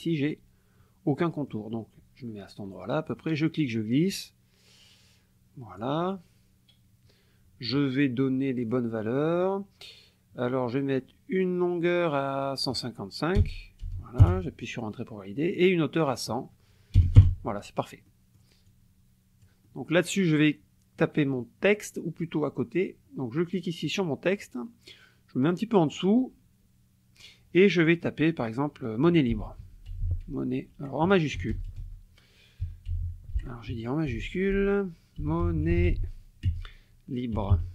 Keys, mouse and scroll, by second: 1.2 click, 3.1-6.0 drag, 8.7 click, 12.4-12.9 drag, 13.4 BackSpace, 14.2 Return, 16.1 click, 17.0 BackSpace, 17.2 Return, 18.1 click, 18.7 click, 23.8 click, 25.9 click, 29.1-31.4 typing, 32.6 o, 32.9 n, 33.7 Caps_Lock, 34.1-37.7 typing.